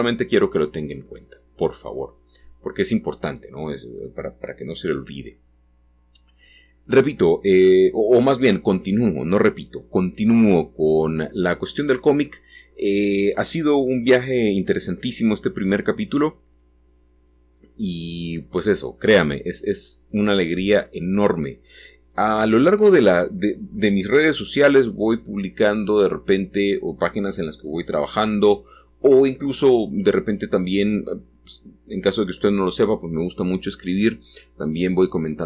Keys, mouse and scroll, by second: 0.5-1.9 scroll up 1, 2.3-7.8 drag, 10.3 g, 12.2 shift+click, 15.1 shift+click, 20.6 shift+click.